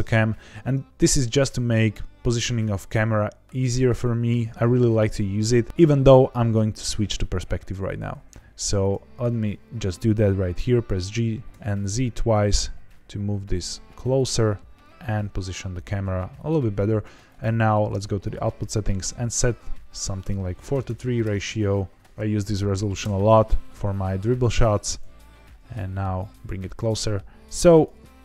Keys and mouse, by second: 0.0-3.1 drag, 7.3-8.8 drag, 10.4 g, 11.1 z, 11.4 z, 14.1 click, 14.8 g, 16.3 click, 17.2 click, 18.2 click, 19.2 KP_6, 20.8 KP_0, 22.1 click, 22.1 KP_0, 24.5 g, 24.7 z, 24.9 z, 27.6 click.